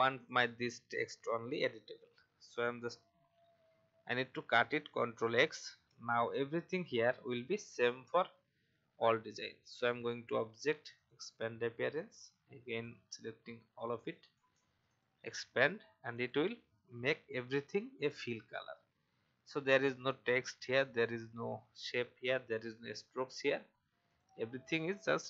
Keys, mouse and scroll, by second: 5.1 ctrl+x, 6.0-6.8 alt+scroll down 1, 6.8-24.1 drag.